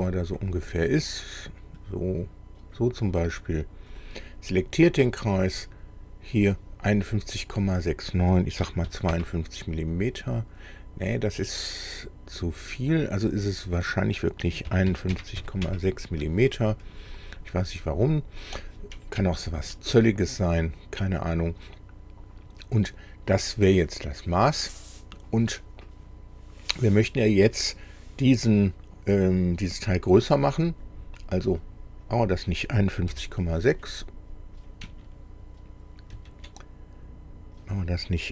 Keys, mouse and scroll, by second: 0.3 click, 1.2-2.9 drag, 3.9 click, 5.5 click, 8.6 KP_5, 8.9 KP_2, 9.1 KP_Enter, 13.0 click, 14.7 KP_5, 14.9 KP_1, 15.4 KP_Decimal, 15.4 KP_6, 15.6 KP_Enter, 16.9-17.4 scroll down 1, 18.0-18.5 scroll down 1, 19.0 shift+middle click, 20.2 scroll down 2, 30.5 click, 32.1 click, 33.1 Delete, 36.1 ctrl+z, 37.6 click.